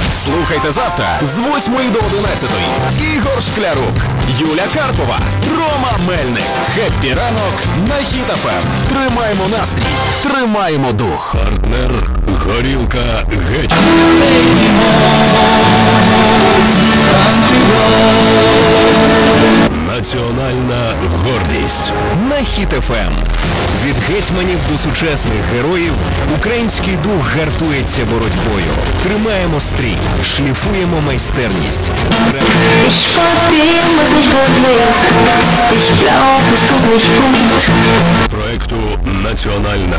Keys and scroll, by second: 19.8 Page_Down, 38.9 Page_Down.